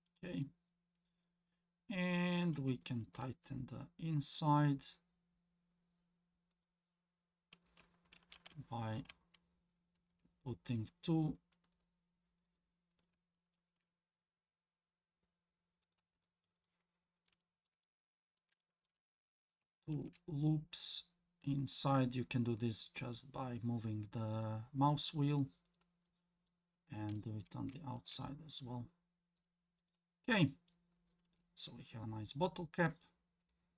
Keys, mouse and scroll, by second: 0.4-2.3 middle drag, 3.0 ctrl+r, 8.2 ctrl+z, 10.0 ctrl+r, 13.5 ctrl+r, 16.2 middle click, 16.9-17.3 scroll up 2, 17.4 shift+middle click, 17.8 scroll up 1, 17.8 middle click, 18.6 shift+middle click, 19.1-19.6 scroll up 3, 19.9 ctrl+r, 26.1 middle click, 26.7 scroll down 2, 27.1 shift+middle click, 28.0 ctrl+r, 30.2 middle click, 30.9 scroll down 1, 31.3 Tab, 31.7-32.9 middle drag, 33.1-33.5 scroll down 2, 33.5-33.7 middle drag.